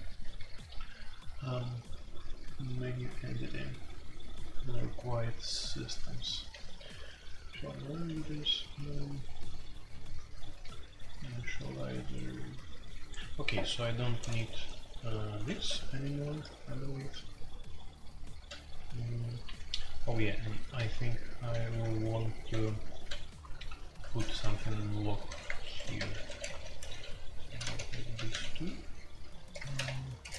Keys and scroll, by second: 0.0-0.3 typing, 2.0-2.4 typing, 3.9 typing, 6.5-6.9 typing, 8.0 typing, 10.4-11.0 typing, 15.3-15.9 typing, 18.4 typing, 19.5-23.6 typing, 21.7 ctrl+u, 25.3-29.7 typing, 26.4 Tab.